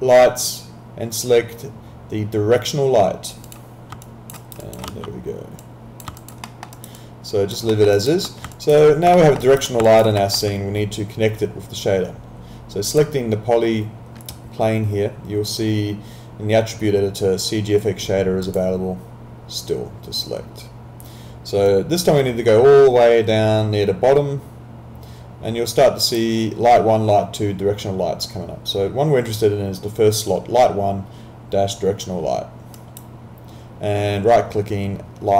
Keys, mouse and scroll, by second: 3.4 click, 4.0 alt+click, 4.4 alt+right click, 4.6 alt+click, 4.9 w, 5.6 click, 6.2 alt+click, 6.4 alt+middle click, 6.8 alt+right click, 7.0 alt+click, 7.7 alt+middle click, 7.9 alt+right click, 8.6 alt+click, 9.2 alt+middle click, 9.4 alt+right click, 9.9 alt+click, 10.2 alt+middle click, 12.9 click, 18.5 click, 21.7 click, 32.8 right click.